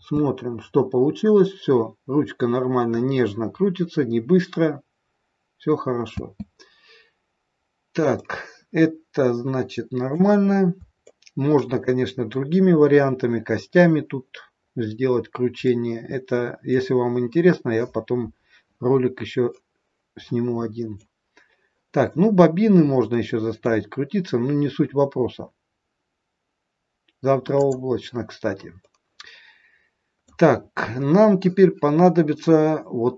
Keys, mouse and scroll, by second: 6.1 space, 7.1-7.5 scroll down 2, 8.2 middle click, 11.0 shift+middle click, 14.5-15.1 scroll up 4, 15.6 middle click, 19.4 middle click, 21.2 scroll down 3, 23.2 middle click, 28.7 middle click.